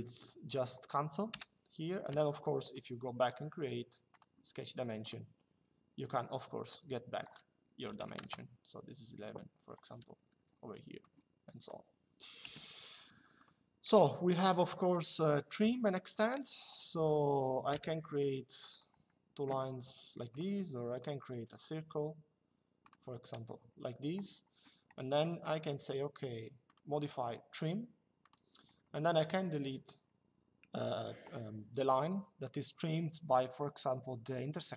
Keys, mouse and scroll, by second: 1.0 Delete, 2.3 click, 3.8 click, 6.3 click, 7.5 KP_1, 7.9 Return, 9.9 Escape, 10.8 click, 12.1 Delete, 13.1 click, 14.6 click, 16.6 Escape, 17.4 click, 18.6 Escape, 20.0 click, 22.5 click, 23.0 Escape, 24.9 middle click, 26.4 click, 28.0 click.